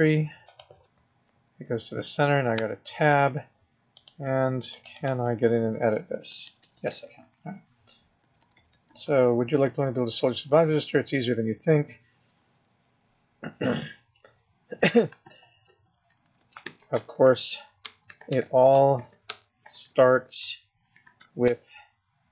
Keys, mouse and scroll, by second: 2.5 Tab, 4.1 click, 4.8 click, 5.5 click, 5.9-10.7 typing, 15.2-21.5 typing.